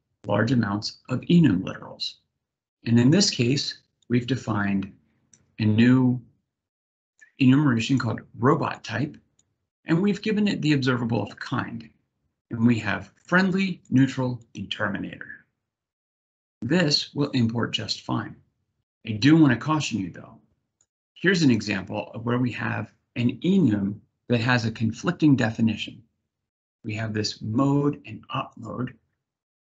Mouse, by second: 3.7-4.9 drag, 6.9 click, 8.4 click, 9.0-9.9 drag, 13.5 click, 14.0 click, 16.9 click, 20.4 click, 27.3 click, 28.2 click.